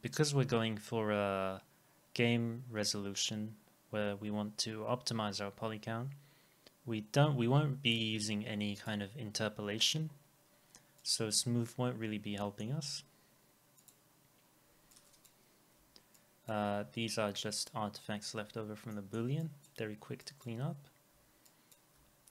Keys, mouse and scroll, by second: 12.4 middle click, 15.8 Delete, 18.5 Delete, 18.9 middle click, 21.1 Delete.